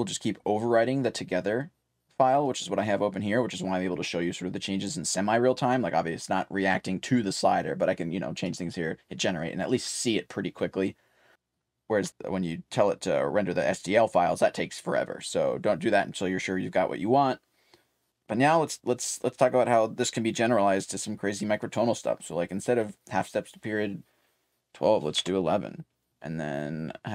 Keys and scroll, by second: 0.6 3, 1.6 2, 2.2 3, 6.1-10.0 typing, 11.5-13.5 typing, 15.4-16.7 typing, 19.1-20.0 typing, 25.1 3, 26.1 2.